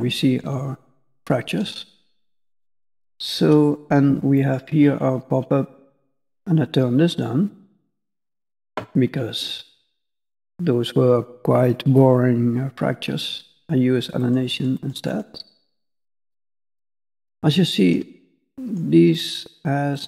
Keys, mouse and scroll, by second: 1.1 middle click, 4.3 click, 6.7 click, 10.0 middle click, 14.2 click, 14.5 click, 14.7 click, 15.1 click, 15.5 click, 15.9 click, 16.7 click, 17.5 shift+middle click, 18.2 middle click, 19.0 scroll down 1, 19.1 middle click.